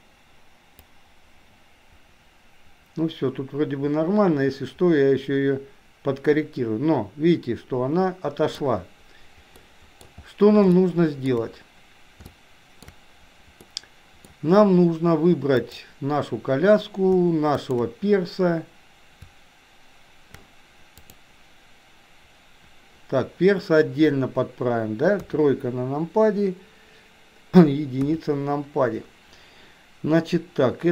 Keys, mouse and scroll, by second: 0.8-8.8 drag, 9.7-10.1 middle drag, 11.0-11.5 shift+middle drag, 12.3 shift+middle click, 13.8 middle click, 15.6 click, 17.6 shift+click, 21.1-23.0 drag, 25.2 KP_3, 28.1 KP_1.